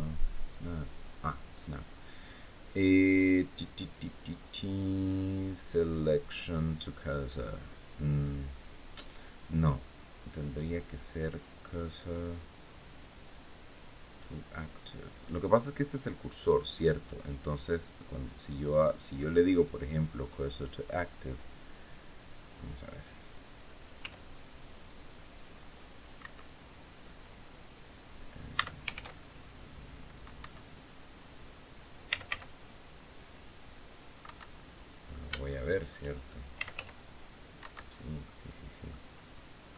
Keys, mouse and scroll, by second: 17.0 click, 20.6 click, 23.7 s, 25.9 Escape, 28.3 s, 28.7 shift+z, 30.1 Escape, 31.6-32.5 typing, 34.0 Escape, 34.3 click, 35.2 shift+click, 36.1-37.0 typing, 37.3 Escape, 37.8 scroll down 1, 38.0 click, 39.1-39.4 scroll down 2, 39.5-39.7 drag.